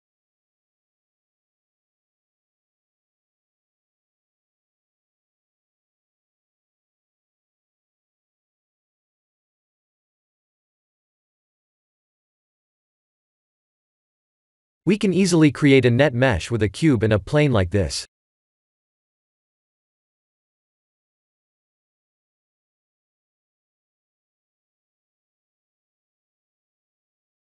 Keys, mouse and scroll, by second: 0.0 middle click, 3.3-3.8 scroll up 1, 4.9 click, 6.3 click, 7.2 click, 8.9 click, 10.2 click, 11.3 middle click, 14.6 middle click, 15.4 click, 16.6 shift+a, 21.9 KP_7, 22.8 s, 24.7 g, 26.5-27.3 scroll up 7.